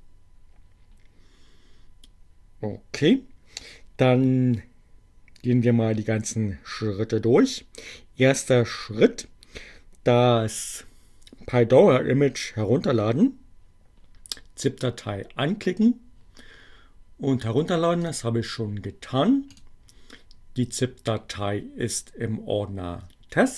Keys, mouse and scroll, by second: 18.0 click, 19.3 click.